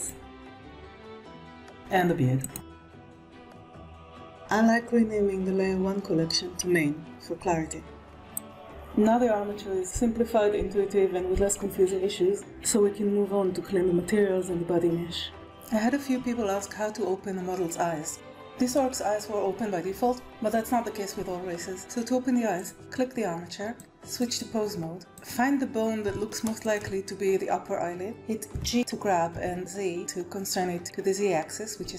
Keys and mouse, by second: 0.1 g, 2.1 click, 3.0 g, 4.0 middle click, 4.8 click, 5.1-8.1 drag, 16.7 shift+middle click, 23.7 click, 28.5 g.